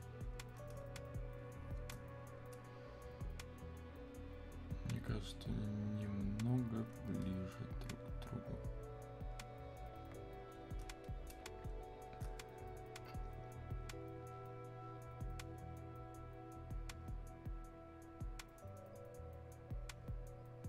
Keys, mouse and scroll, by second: 1.4-4.2 shift+drag, 4.2-14.1 drag, 14.1-20.6 drag.